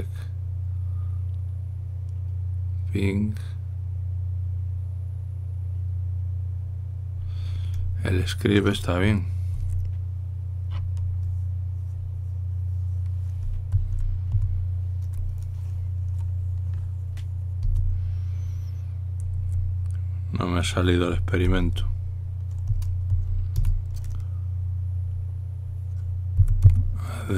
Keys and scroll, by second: 10.3 Escape, 14.5-15.1 typing, 20.3 Escape, 22.1 typing, 23.3-23.8 typing, 24.3 Return, 27.0-27.3 typing.